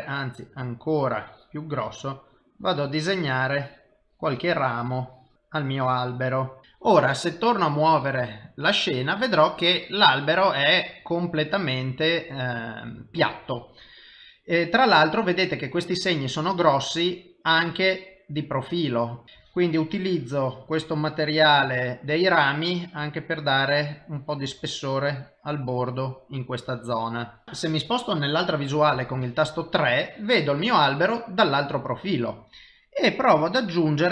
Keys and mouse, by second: 1.1 click, 1.9 click, 3.4-5.9 click, 7.8 middle click, 15.1 middle click, 16.4 middle click, 19.2 KP_1, 19.8 click, 21.0 click, 24.1 click, 25.6-27.4 click, 27.3 click, 28.9 KP_3, 33.4 click.